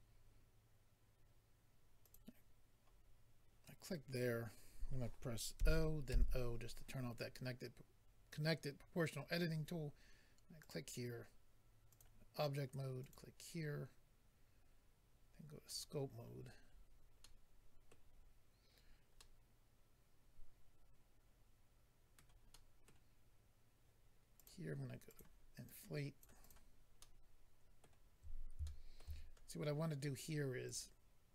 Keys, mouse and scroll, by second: 0.0 click, 2.0 click, 2.1 click, 6.1 o, 10.6 click, 11.9 click, 13.0 click, 15.6 click, 15.8 click, 16.3-16.9 scroll down 3, 17.2 middle click, 17.2 scroll down 1, 18.1-19.1 scroll down 2, 19.3 scroll down 1, 22.2 middle click, 22.5 middle click, 24.4 click, 24.4 click, 25.1 click, 25.2 click, 25.6 click, 26.4 click, 26.5 click, 27.0 middle click, 28.6 shift+middle click, 29.2-30.2 scroll up 2, 30.6 click, 30.7 click.